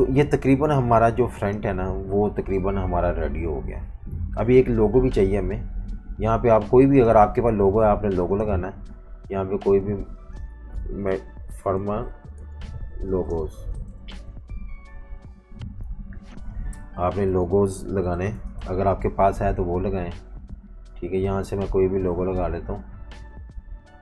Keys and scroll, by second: 0.0-1.2 typing, 4.4 super+-, 4.8 super+-, 5.1 super+-, 11.4-14.2 typing, 16.7-19.4 typing.